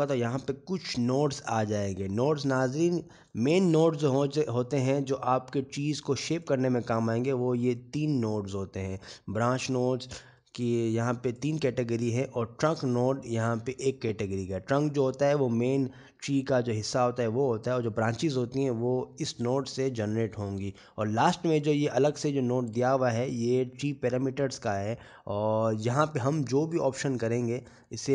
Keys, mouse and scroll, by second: 0.6-2.2 scroll up 22, 2.8 middle click, 4.5 click.